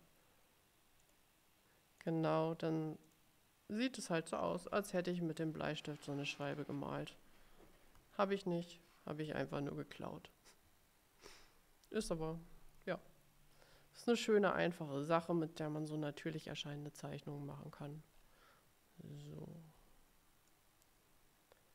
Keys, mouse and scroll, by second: 1.1 click, 3.2 click, 5.2 click, 6.5 click, 8.2-8.9 ctrl+scroll up 4, 17.8-18.5 ctrl+scroll down 4, 19.2-19.7 ctrl+scroll down 2, 20.6-21.7 drag.